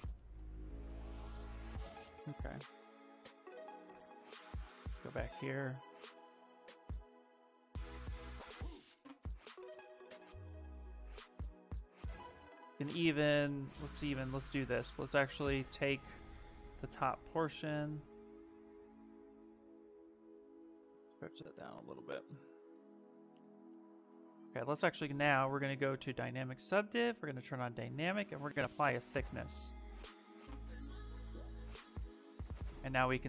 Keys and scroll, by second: 11.5 Escape, 11.9 w, 13.9 q, 18.2 w, 21.8 q, 22.5 s, 30.3 shift+f, 30.7 s.